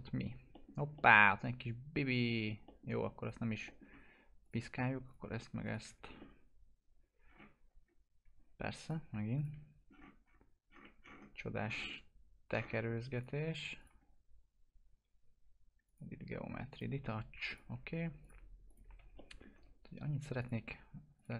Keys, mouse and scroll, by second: 0.7 scroll down 1, 0.9-2.6 alt+middle drag, 2.8 scroll down 1, 3.1 click, 3.6 alt+middle click, 4.4 click, 5.6 ctrl+click, 7.2-8.8 scroll down 1, 8.8 click, 9.3 ctrl+click, 9.8-10.7 scroll down 1, 13.1 click, 13.7 ctrl+click, 18.9 alt+q, 19.1 alt+middle click, 20.3 click.